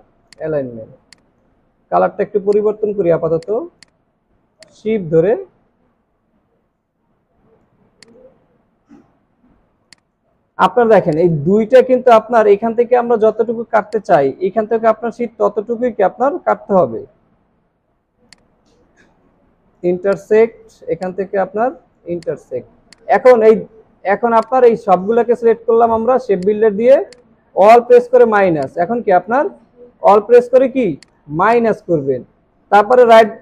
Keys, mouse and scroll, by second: 0.9 alt+scroll down 1, 3.8 double click, 9.8 alt+scroll down 1, 10.5 alt+scroll up 3, 13.5 alt+scroll down 1, 17.7 alt+scroll up 1, 19.9 space, 22.5 alt+scroll down 1, 27.1 alt+click, 28.5 alt+click, 31.9 alt+scroll up 1.